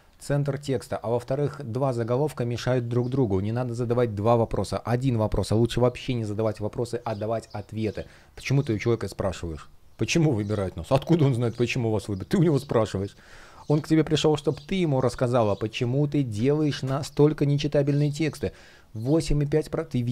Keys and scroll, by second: 2.7 super+z, 12.9 space.